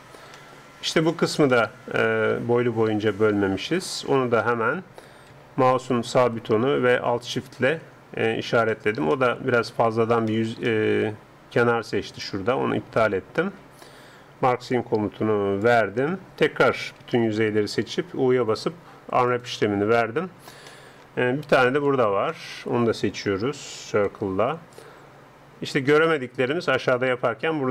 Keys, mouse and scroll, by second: 4.1-7.2 middle drag, 5.3 a, 7.2-8.9 right drag, 8.2 middle click, 8.7-12.1 middle drag, 13.9 right click, 15.6-17.3 drag, 17.0 a, 17.3 a, 18.3 u, 23.3 a, 24.1 c.